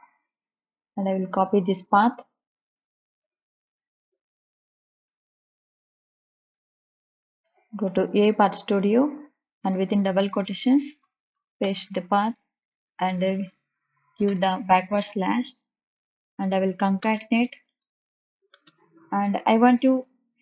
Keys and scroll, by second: 7.2 ctrl+c, 11.0 Left, 11.6 ctrl+v, 14.2 \, 16.9 space, 17.6 shift+=, 18.4 space, 19.7 e, 19.9 m.